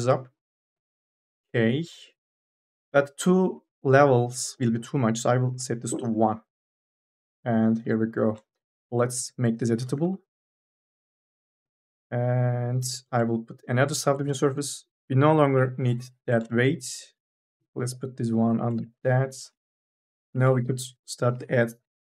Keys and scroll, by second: 9.0 c, 9.9 3, 11.0 2, 11.2 e, 15.4 Delete, 17.8 ctrl+z, 19.1-21.9 typing.